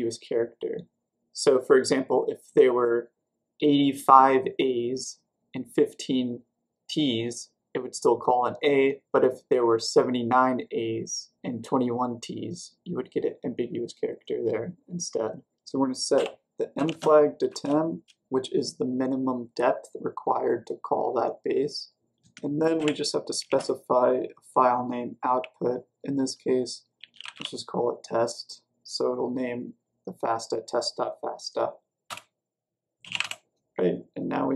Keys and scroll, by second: 16.6-18.0 typing, 22.1-23.9 typing, 26.7-27.8 typing, 32.0 Return, 32.9-33.6 typing.